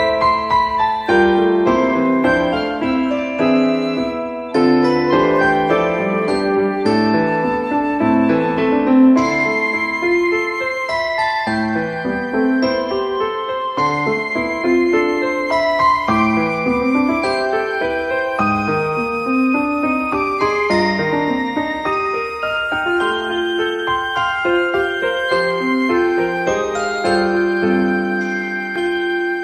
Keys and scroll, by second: 2.8 ctrl+a, 4.6 t, 12.9 p.